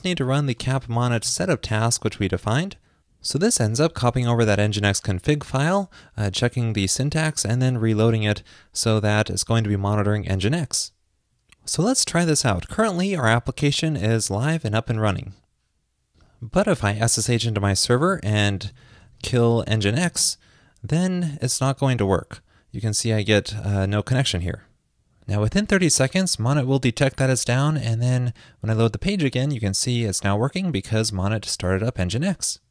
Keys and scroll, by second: 21.3 super+Tab, 22.0 super+r.